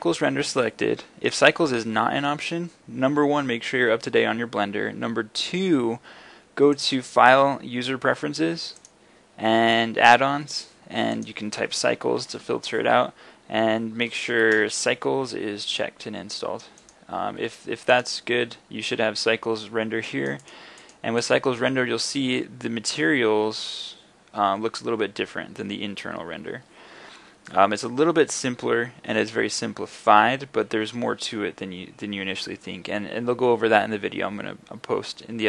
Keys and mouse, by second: 22.1-35.4 drag.